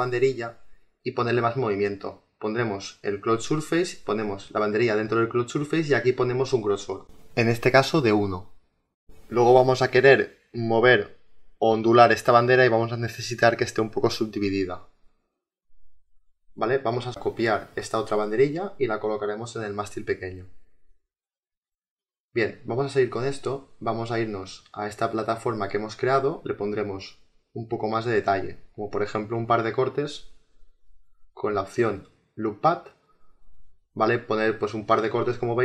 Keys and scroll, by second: 6.9 1, 8.3 Return.